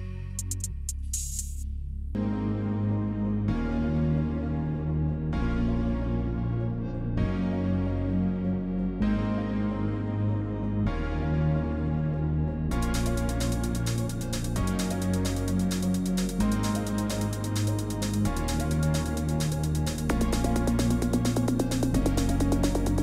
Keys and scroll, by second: 0.0-0.9 typing, 1.9-4.2 typing, 4.9 ctrl+v, 6.5 ctrl+v, 8.0-8.8 typing, 12.7 ctrl+v, 13.2 BackSpace, 17.6 ctrl+v.